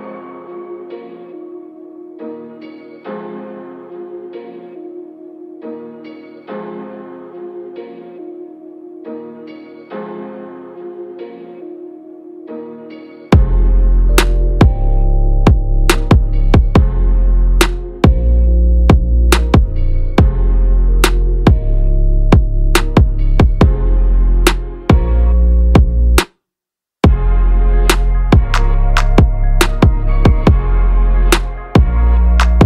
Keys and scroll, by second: 9.4 ctrl+=, 9.8 space, 18.1 ctrl+-.